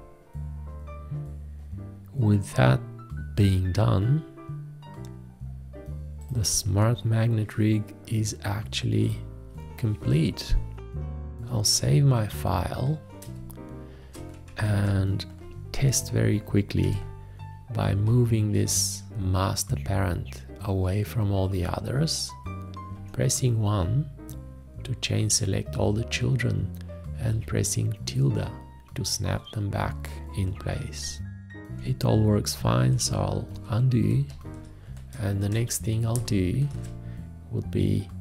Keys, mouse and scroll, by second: 11.5 ctrl+s, 13.3 space, 14.7 ctrl+a, 16.9 v, 22.9 1, 27.3 `, 32.5 ctrl+z.